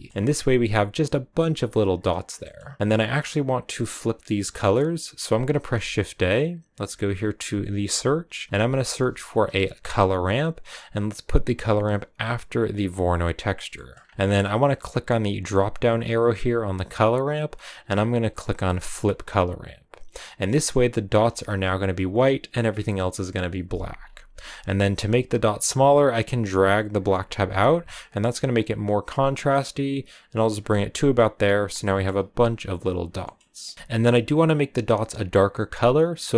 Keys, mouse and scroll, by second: 0.1-0.8 scroll up 3, 2.8-10.6 drag, 13.2 click, 13.6-18.9 middle drag, 18.9-20.2 drag, 20.3 middle click, 20.6 scroll up 2, 25.1-29.4 drag, 30.4-30.9 scroll down 4, 30.9 middle click, 31.8 scroll up 3, 32.9 scroll up 3, 34.0 scroll up 1.